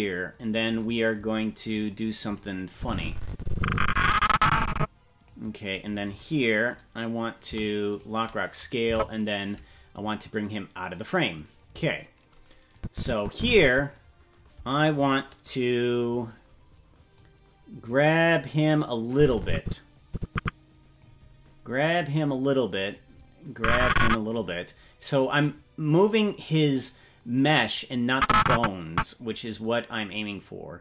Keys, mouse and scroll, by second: 0.2-0.7 scroll up 5, 1.3-1.8 scroll up 4, 2.7-5.3 drag, 7.4 i, 8.9 Right, 10.4 click, 12.7-13.9 drag, 17.1 click, 19.1-21.0 drag, 22.0-23.0 drag, 23.5 click, 25.4-27.4 drag, 28.1-29.3 drag, 30.3 click.